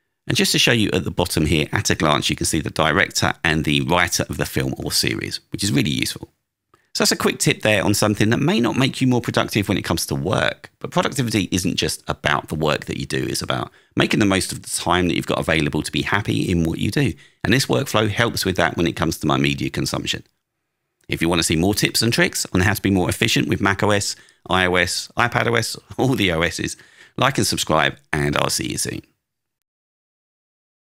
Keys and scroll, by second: 1.7 Down, 5.4 Down.